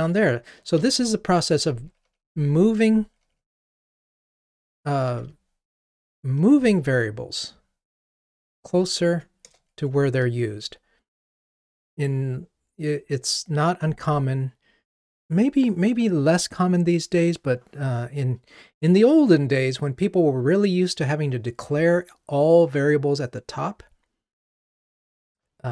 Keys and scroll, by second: 1.7 alt+shift+Down, 3.3 alt+shift+Down, 3.8 alt+shift+Down, 5.9 alt+shift+Down, 10.1 ctrl+r.